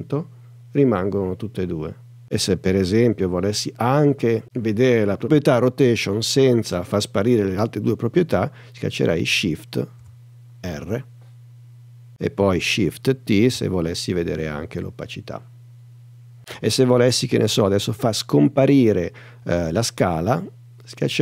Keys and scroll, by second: 10.0 shift+r, 13.5 shift+t.